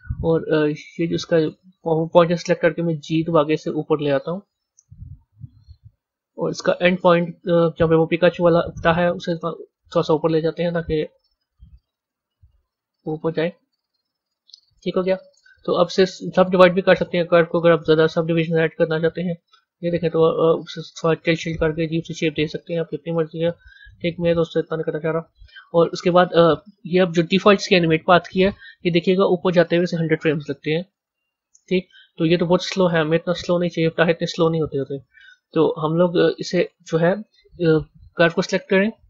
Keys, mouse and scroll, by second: 1.3 click, 6.0 KP_1, 7.1 middle click, 9.7 Tab, 10.0 click, 10.9 g, 13.3-16.2 middle drag, 16.2 click, 16.9 b, 18.4-20.4 right drag, 20.4 click, 24.6 Tab, 26.3 click, 28.8-33.5 drag, 34.6 click, 35.7-38.5 drag.